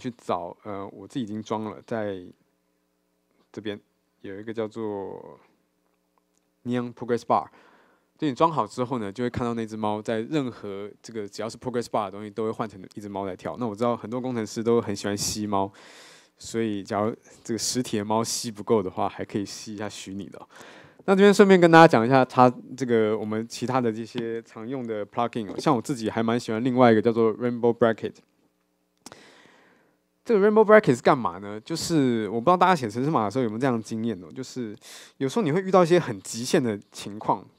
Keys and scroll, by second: 34.8 ctrl+shift+super+o.